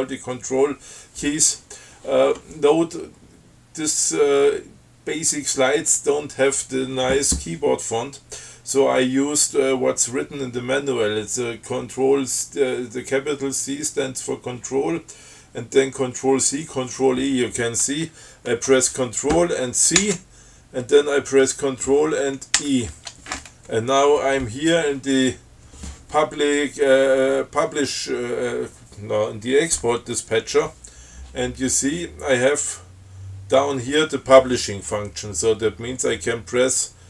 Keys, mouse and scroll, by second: 20.3 ctrl+c, 22.8 ctrl+e.